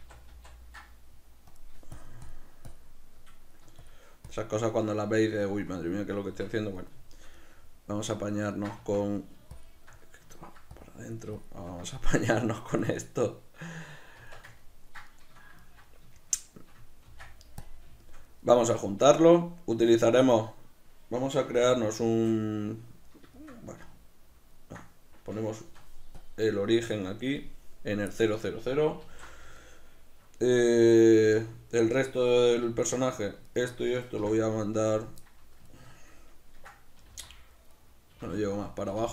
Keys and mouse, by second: 1.6 click, 3.5 middle click, 3.9 shift+click, 4.9-9.2 middle drag, 6.4 b, 6.5 Tab, 8.8 Tab, 9.6 shift+click, 10.1 ctrl+middle click, 10.8 click, 12.4 middle click, 12.9 click, 13.3-21.5 middle drag, 14.3 b, 14.4 Tab, 17.1 ctrl+s, 21.5 shift+c, 22.1 shift+a, 23.4-26.3 shift+middle drag, 26.3-28.2 drag, 28.2-33.2 middle drag, 29.1 alt+o, 31.4 a, 33.2-34.3 right drag, 34.3 m, 35.8-37.9 ctrl+middle drag, 37.1 g, 37.9 right click, 38.2 g, 38.8 click, 39.0 g.